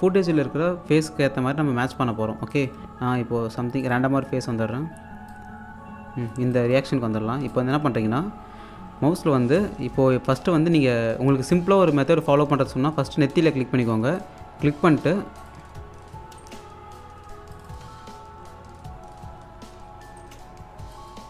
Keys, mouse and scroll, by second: 2.2 scroll down 1, 2.5 alt+click, 4.4-5.2 scroll up 1, 5.6 click, 7.3 scroll up 1, 7.5 alt+click, 8.3-9.0 scroll down 1, 14.2-14.6 scroll down 1, 14.6 click, 16.4 space, 17.5 click, 17.8 1, 20.2 space, 20.9 click.